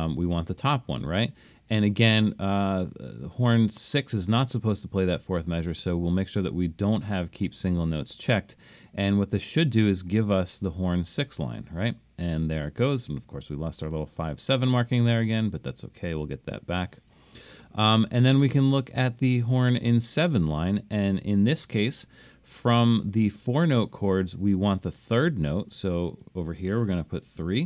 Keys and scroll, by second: 27.4 3.